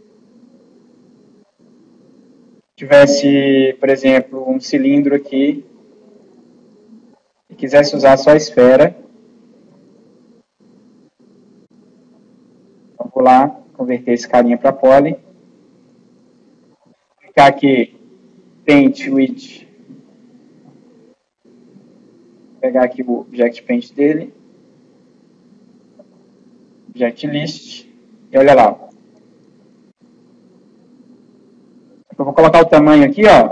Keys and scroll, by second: 29.6 ctrl+z.